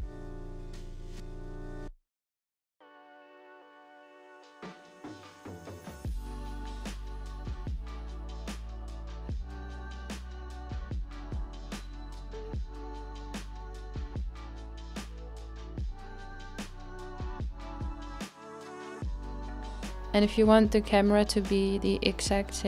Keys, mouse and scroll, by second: 1.0-1.6 scroll up 2, 2.6-4.3 drag, 4.3-6.4 shift+middle drag, 6.4-8.6 drag, 8.6-14.2 middle drag, 14.2-17.3 drag, 22.4 middle click.